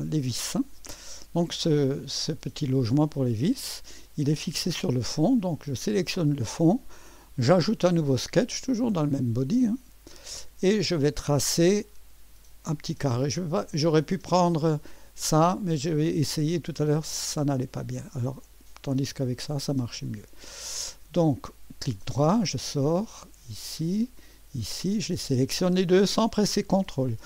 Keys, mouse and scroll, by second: 0.1 click, 4.2 click, 9.5 click, 14.5 click, 15.8 click, 17.0 click, 18.4 click, 19.5 click, 20.6-21.5 scroll up 2, 21.5 click, 22.9 click, 24.2 click.